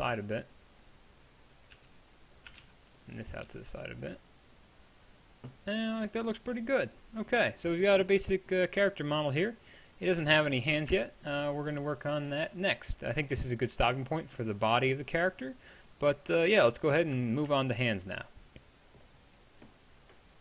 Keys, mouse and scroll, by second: 0.1 b, 1.8 g, 2.5 a, 2.6 b, 3.5 g, 6.5-10.9 drag, 7.4 Tab, 10.9-16.4 middle drag, 16.8 middle click, 17.2 a.